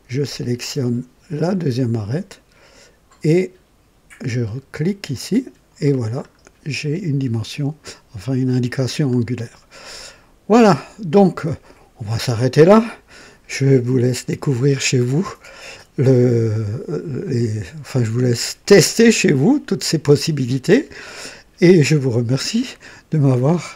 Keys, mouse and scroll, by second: 1.9 click, 5.1 click, 6.2-7.0 scroll up 2, 9.0-9.5 scroll down 2, 10.0-12.1 drag, 13.9-17.2 drag.